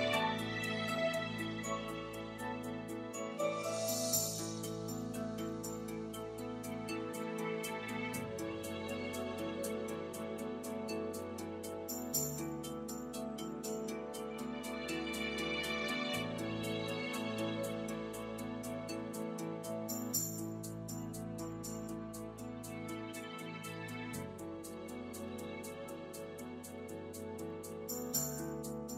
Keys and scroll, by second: 2.1 BackSpace, 12.2 •, 12.5 2, 13.9 Home, 24.4 e.